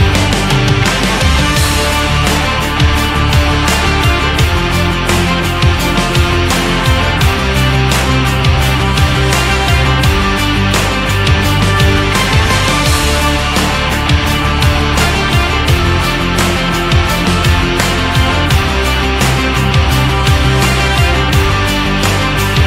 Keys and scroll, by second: 0.0-1.0 typing, 4.5 ctrl+-, 5.0 ], 5.9 ctrl+z, 8.0 ctrl+alt+shift+e, 8.9 ctrl+j.